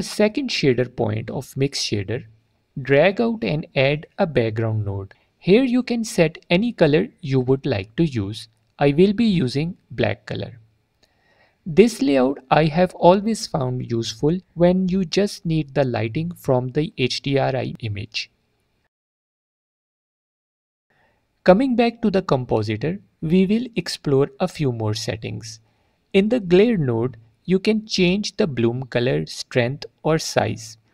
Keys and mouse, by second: 0.2-0.5 drag, 2.7-4.2 drag, 5.3 click, 12.4 click, 13.3 click, 17.4 click, 19.1 middle click, 22.8-24.2 drag, 25.6 alt+click, 27.4-28.6 drag, 30.8 click.